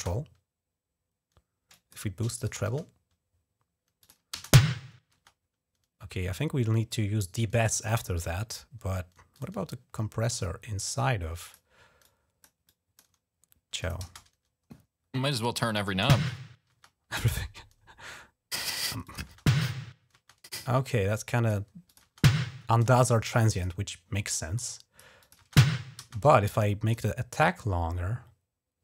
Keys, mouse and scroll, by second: 1.5 click, 2.1 click, 2.4 space, 3.8 click, 4.1 space, 4.9 space, 6.1-7.5 drag, 7.9 click, 9.1 click, 10.2-11.3 drag, 11.8 click, 12.4 click, 12.9 click, 12.9-13.8 typing, 13.6 click, 15.0 click, 15.4 click, 15.6 space, 18.3 click, 18.8 click, 19.1 space, 19.9 space, 20.4 click, 21.6 click, 21.8-24.0 typing, 23.0 click, 23.5 click, 24.3 click, 25.0 click, 26.1 click, 27.1-28.8 drag.